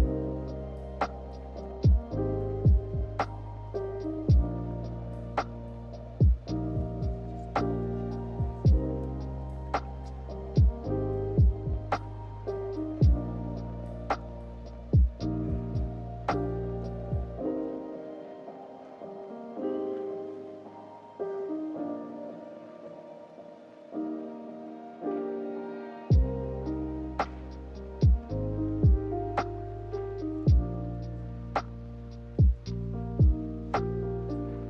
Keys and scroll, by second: 7.7 z, 11.9 k, 15.5 z, 24.3 k, 27.1 z, 33.5 k.